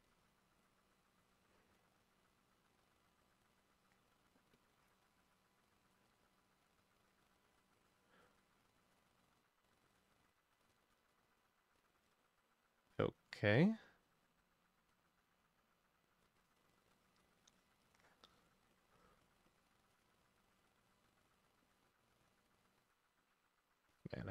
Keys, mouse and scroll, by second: 3.6-10.8 drag, 17.6-24.3 drag.